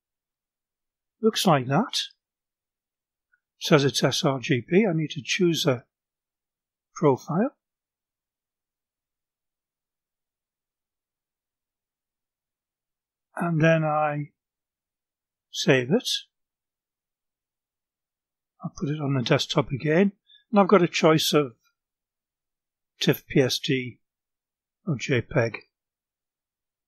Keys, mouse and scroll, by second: 4.2 click, 8.4 click, 16.9 click, 19.5 click, 21.2 click, 22.8-24.6 typing, 25.6-26.8 typing.